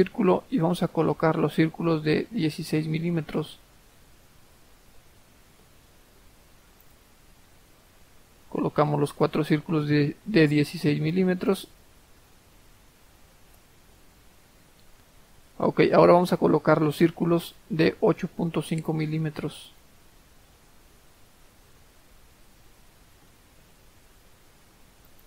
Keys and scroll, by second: 4.0-5.0 typing, 5.6 Return, 8.0-8.7 typing, 9.1 Return, 12.6-13.1 typing, 13.5 Return, 21.2-22.3 typing, 22.7 Return.